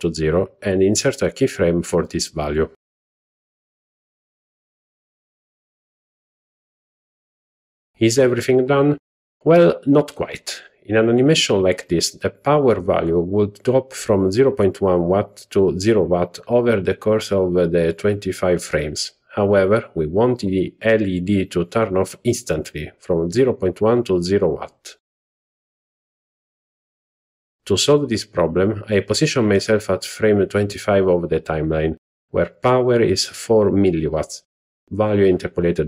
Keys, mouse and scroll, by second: 1.8 i, 7.1 z, 9.1 click, 10.3 Right, 10.6 Right, 11.0 Right, 11.3 Right, 11.4 Right, 11.7 Right, 11.8 Right, 12.0 Right, 12.2 Right, 12.4 Right, 12.6 Right, 12.8 Right, 13.0 Right, 13.2 Right, 13.4 Right, 13.6 Right, 13.8 Right, 14.0 Right, 14.2 Right, 14.4 Right, 14.6 Right, 14.9 Right, 15.3 Right, 16.0 Right, 16.7 Left, 17.3 Left, 17.7 Left, 18.1 Left, 19.0 Right, 19.3 Right, 19.8 Right, 23.5 z, 35.2-35.8 drag.